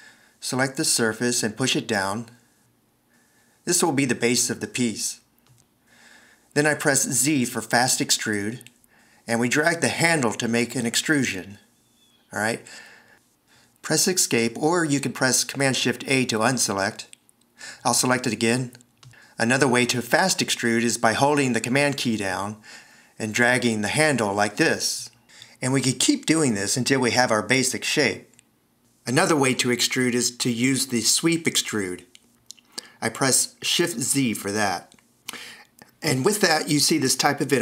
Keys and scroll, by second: 2.1 d, 8.9 z, 15.4 shift+super+a, 34.6 shift+z.